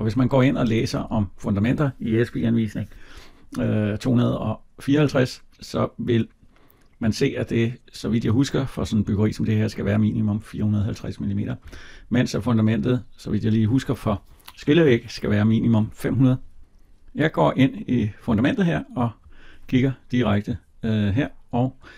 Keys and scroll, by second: 0.7 Escape, 11.4 Escape.